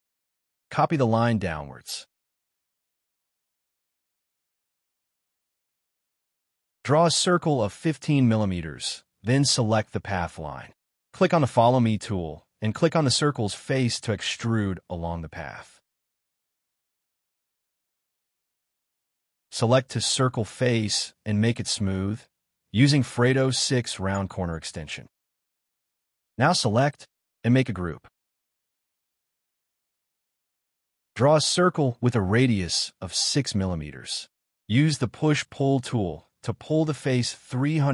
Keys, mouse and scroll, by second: 1.2 m, 2.3 Up, 2.7 3, 3.7 Return, 4.2 space, 4.2 middle click, 4.4 c, 6.1 Left, 10.3-11.8 typing, 13.8 middle click, 15.6 scroll down 1, 15.8 middle click, 17.0 space, 17.8-19.0 scroll up 1, 19.0 double click, 19.3 shift+click, 19.5 shift+middle click, 19.9 scroll down 1, 20.2 scroll up 1, 20.5 shift+click, 20.6 shift+double click, 23.9-24.2 scroll down 2, 24.0 space, 24.3 middle click, 25.1 space, 25.7 double click, 26.4 g, 28.5 middle click, 28.7 b, 28.8 scroll up 1, 29.0 c, 29.6-30.4 scroll up 1, 30.9 ctrl+z, 31.5 6, 31.8 Return, 33.1-33.9 scroll up 1, 33.9-34.6 scroll down 1, 34.7 0, 36.1 Return, 36.7 scroll down 1, 37.1 space, 37.3 scroll down 1, 37.6 shift+middle click.